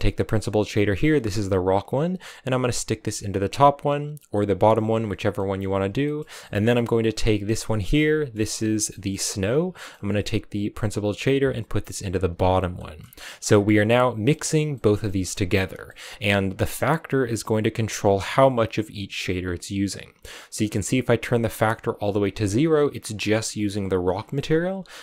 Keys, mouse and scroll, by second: 0.3 click, 1.5 click, 5.2-7.5 middle drag, 7.5 click, 7.8-9.0 middle drag, 9.0-9.6 scroll up 3, 9.6-10.8 middle drag, 10.8 click, 12.2 click, 12.6 middle click, 12.9 scroll up 5, 13.1 middle click, 13.6 click, 14.6 middle click, 15.0 shift+middle click, 15.5 scroll up 5, 15.8 middle click, 16.3-19.4 scroll down 1, 20.0-21.9 drag, 21.9-22.9 scroll down 5, 24.0-24.4 scroll up 1.